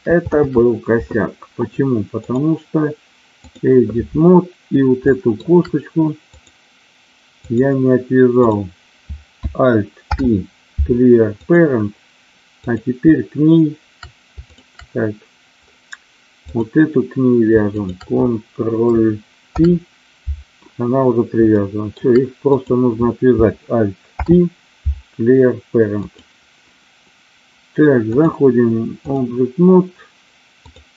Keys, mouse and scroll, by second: 0.4 ctrl+z, 2.3-3.6 drag, 5.1 shift+middle click, 6.3-7.4 drag, 8.5 click, 10.0 alt+p, 12.6-13.7 drag, 16.4 click, 17.8 shift+click, 19.5 ctrl+p, 21.7 shift+middle click, 22.5 click, 24.1 alt+p, 28.1-29.2 drag, 30.6 click.